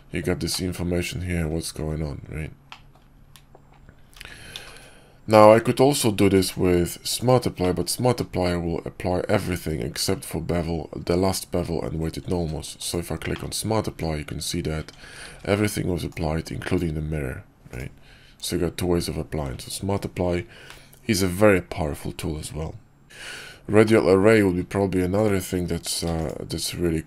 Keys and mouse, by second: 0.4-0.9 drag, 0.9-1.3 middle drag, 2.6 middle click, 4.0 ctrl+z, 4.4 ctrl+z, 6.2 alt+x, 7.1 click, 7.5 click, 8.0 q, 13.2 drag, 13.8 Tab, 14.7 Tab, 15.2 ctrl+`, 23.7 drag, 25.0 click, 25.9 x.